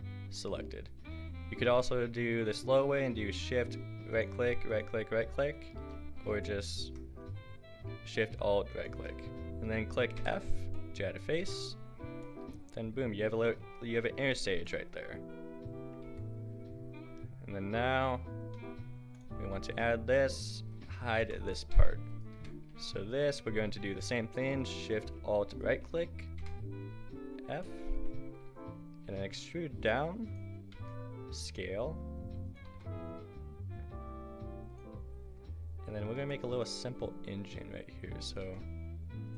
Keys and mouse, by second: 1.5 a, 6.0 a, 10.2 f, 11.4 Tab, 14.3 Tab, 16.1 Tab, 20.1-21.2 drag, 21.2 h, 21.6-22.2 drag, 22.3 Tab, 24.0 click, 26.5 f, 29.0 e, 30.7 s, 32.6 g, 34.4-35.8 middle drag, 38.1 e, 38.4 s.